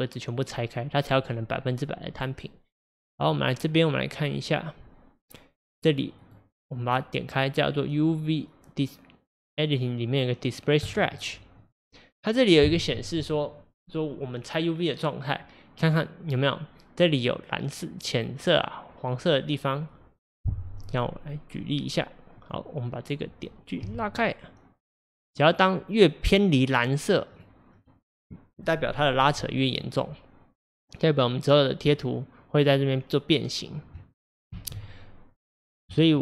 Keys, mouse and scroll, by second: 11.7 click, 20.9 click, 22.5 click, 23.9 g, 34.5 ctrl+z.